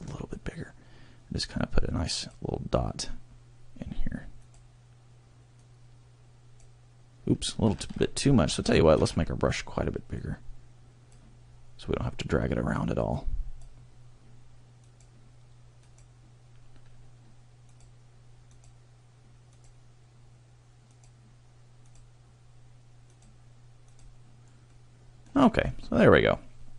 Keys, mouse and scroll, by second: 2.2 click, 4.5 click, 5.6 click, 8.0 ctrl+z, 8.6 ctrl+z, 9.1 ctrl+z, 10.2 click, 13.1 click, 15.0 click, 15.9 click, 17.8 click, 18.6 click, 19.6 click, 21.0 click, 22.0 click, 23.2 click, 24.0 click, 24.6 middle click, 25.4 scroll down 1, 25.8 middle click.